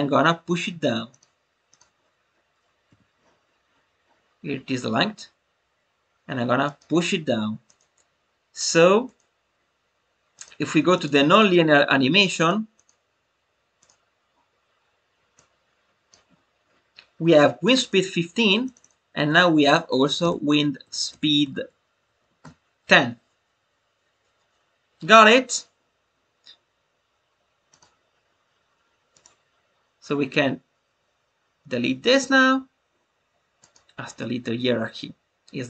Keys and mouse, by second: 1.0 click, 7.6-9.1 drag, 10.4-11.0 drag, 11.2 click, 12.3 click, 12.7-13.9 drag, 15.3 click, 18.6-25.6 drag, 27.6 click, 29.1-32.1 drag, 33.0-33.6 right drag.